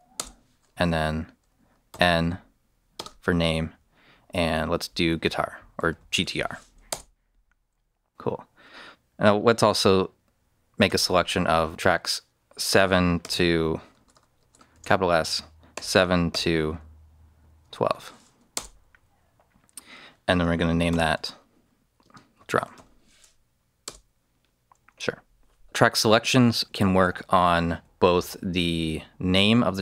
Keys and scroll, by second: 0.1 Return, 1.8 n, 2.9 space, 5.5-6.7 typing, 6.8 Return, 10.8 s, 12.6-16.2 typing, 17.5-18.3 typing, 18.5 Return, 20.8 n, 22.0-23.2 typing, 23.8 Return.